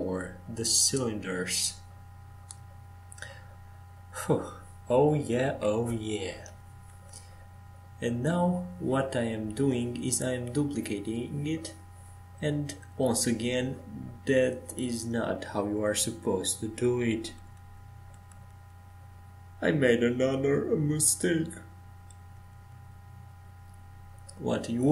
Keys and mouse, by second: 4.9-7.7 right drag, 7.7 ctrl+j, 10.2 shift+d, 13.2 shift+d, 15.7 shift+d, 18.0 click, 19.3 shift+d, 21.3 shift+d.